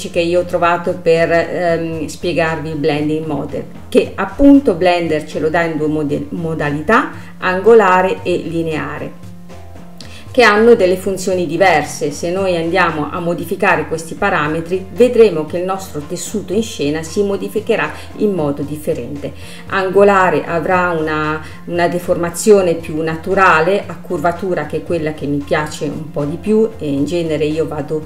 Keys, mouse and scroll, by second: 14.9-17.9 drag, 27.5 space.